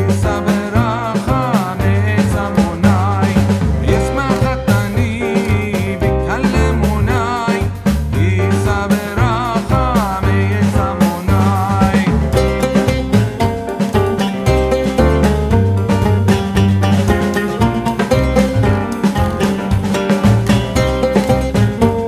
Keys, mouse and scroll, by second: 6.8 click, 8.8 ctrl+shift+[, 11.0 click, 14.5 typing, 14.9 click, 19.9 click, 20.8 typing.